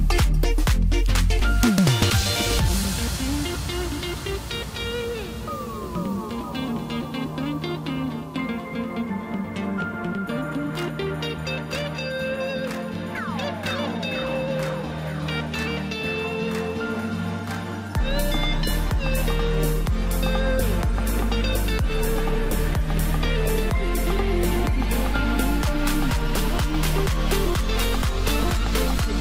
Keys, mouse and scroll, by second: 7.5-8.6 middle drag, 8.6 s, 9.9 middle click, 10.7 e, 12.4-14.3 middle drag, 14.3-15.3 scroll down 1, 15.3 scroll down 1, 15.4 KP_1, 16.9 Tab, 17.4 scroll down 1, 17.7-19.8 middle drag, 19.8 scroll up 2, 20.0-20.5 middle drag, 20.5 click, 21.3 Tab, 21.8-22.8 middle drag, 22.8 click, 24.2-26.5 middle drag, 26.5 e.